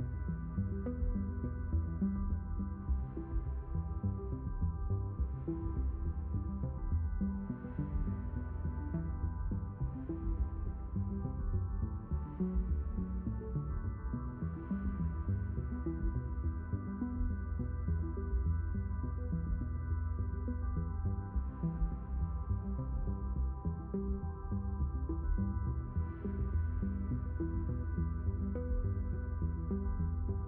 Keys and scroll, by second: 15.8 6, 17.0 Return, 22.4 8, 24.1 Return.